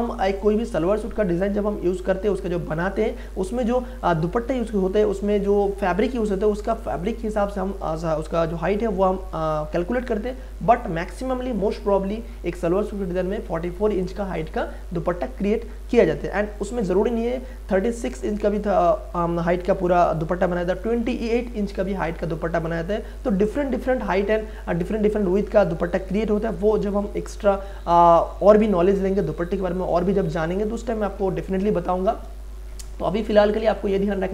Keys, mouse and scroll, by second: 1.3-5.0 drag.